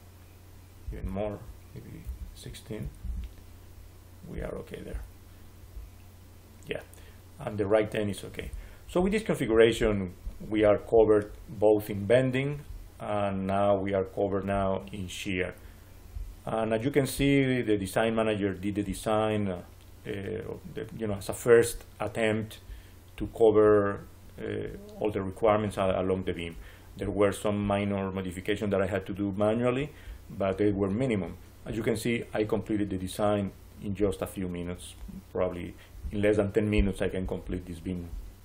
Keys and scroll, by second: 1.9 1, 2.7 6, 2.9 Return.